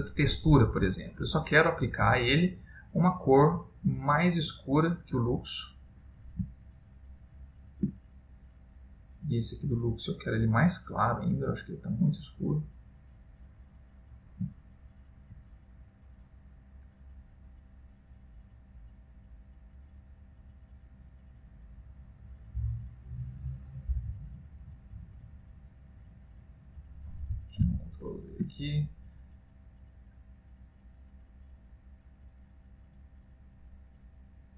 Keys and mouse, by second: 1.0 shift+middle click, 1.3 click, 6.8 ctrl+middle click, 8.7 click, 11.5 click, 13.6 middle click, 14.9 ctrl+middle click, 16.6 click, 18.7 click, 20.3 click, 23.2 click, 24.8 click, 27.9 ctrl+z, 29.8 click, 31.8 click.